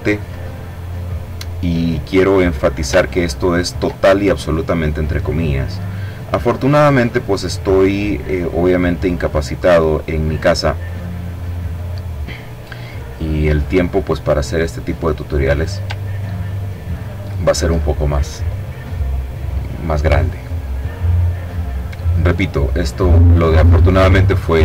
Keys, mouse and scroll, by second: 0.6 click, 1.8-2.4 ctrl+scroll up 2, 3.6-5.2 drag, 5.6-9.6 drag, 9.6-11.1 drag, 12.0-14.6 drag, 14.9-15.4 ctrl+scroll down 2, 15.7-16.1 ctrl+scroll down 2, 19.8 middle click, 20.4-22.3 drag.